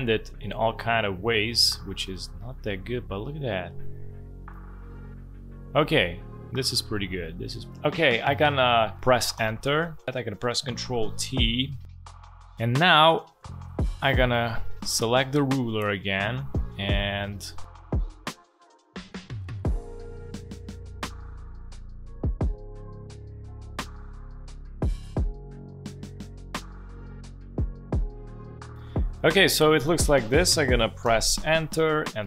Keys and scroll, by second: 9.3 Return, 10.8 ctrl+t, 31.0 Return.